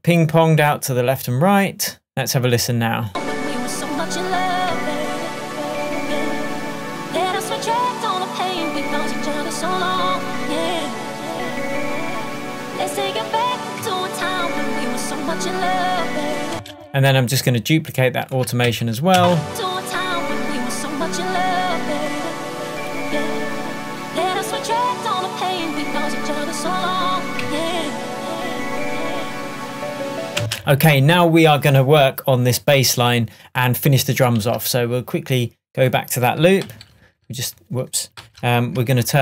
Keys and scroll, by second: 4.7 Tab, 13.8 Tab, 16.6 space, 20.2 space, 30.4 space, 34.5 super+s, 36.7 super+k, 38.3 super+k, 38.9 super+l.